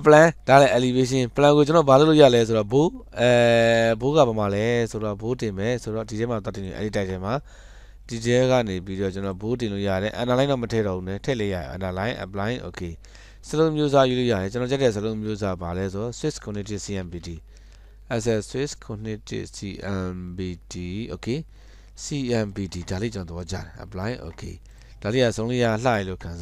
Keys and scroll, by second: 17.4 typing.